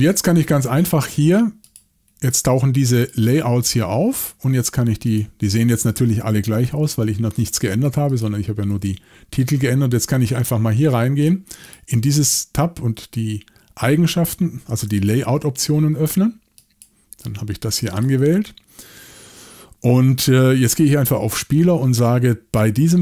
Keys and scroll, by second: 6.7 typing, 8.7 typing, 15.1 shift+super+l.